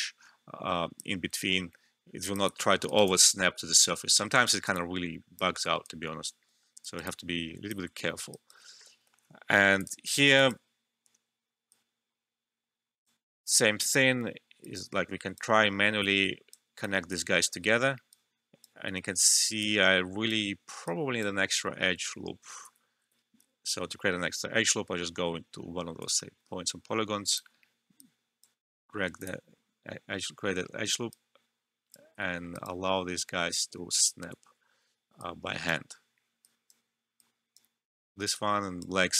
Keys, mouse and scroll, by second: 2.5 alt+middle click, 2.8 alt+right click, 3.0 alt+click, 4.2 alt+middle click, 4.4 alt+right click, 4.7 alt+click, 5.5 alt+middle click, 5.8 alt+right click, 6.4 alt+middle click, 6.8 alt+right click, 7.0 alt+click, 8.3 alt+right click, 9.0 alt+middle click, 9.8 click, 10.3-18.9 alt+right drag, 18.9 ctrl+z, 19.6-22.6 right drag, 22.6 ctrl+z, 25.9 click, 27.2 ctrl+click, 27.9 right click, 29.1 click, 31.0 right click, 32.2 alt+middle click, 32.5 alt+right click, 35.1-39.1 right drag.